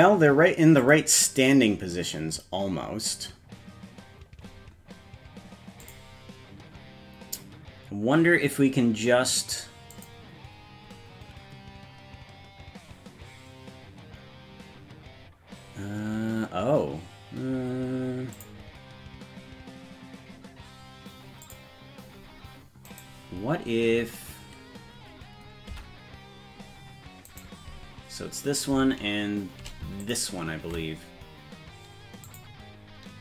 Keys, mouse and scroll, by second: 0.8 click, 5.9 click, 10.0 click, 18.4 click, 21.5 click, 23.0-25.7 right drag, 25.7 c, 30.1 ctrl+click, 32.3 click.